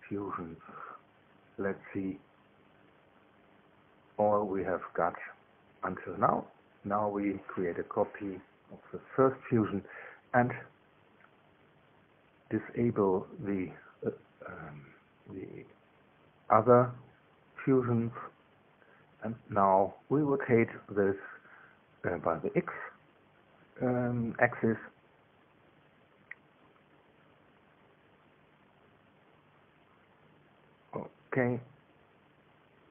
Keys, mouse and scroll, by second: 0.1 space, 0.6 click, 0.8 space, 1.4 click, 1.8 space, 2.7 click, 3.5-4.7 drag, 5.7 click, 6.8 ctrl+c, 8.4 Return, 8.8 ctrl+v, 10.5 click, 11.4 middle click, 12.5 shift+click, 14.9 click, 16.1 shift+click, 17.5 space, 19.5 click, 21.2-22.4 middle drag, 22.4-27.2 drag, 27.2-28.4 middle drag, 28.4 click, 28.8 space, 30.6 space, 31.4 space, 31.7 space.